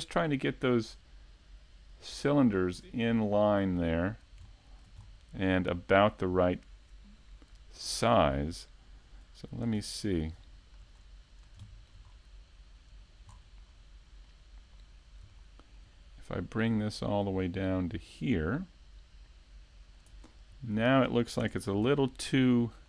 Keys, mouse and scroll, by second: 0.6 p, 2.6 Tab, 3.0 right click, 4.0 s, 4.9 right click, 7.6 click, 10.1 s, 11.5 click, 11.7 middle click, 14.4 click, 15.1 middle click, 17.1 middle click, 17.3 Tab, 17.6 middle click, 18.5-18.8 scroll up 3, 18.8-19.2 scroll down 3, 19.2 scroll down 2, 19.7 middle click, 21.2 middle click, 22.5 Tab.